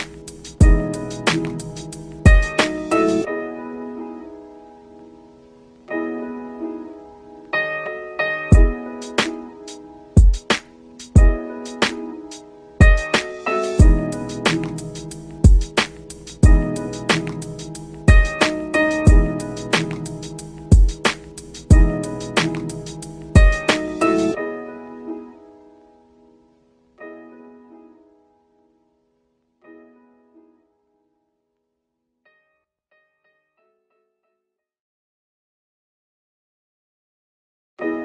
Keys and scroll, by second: 19.4 ctrl+shift+q, 20.2 ctrl+Home, 22.6 ctrl+z, 36.4 ctrl+End.